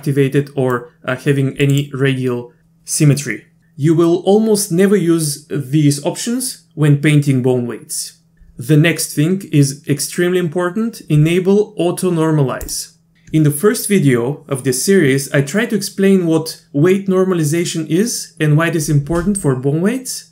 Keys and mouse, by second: 0.8-1.8 drag, 12.6 click.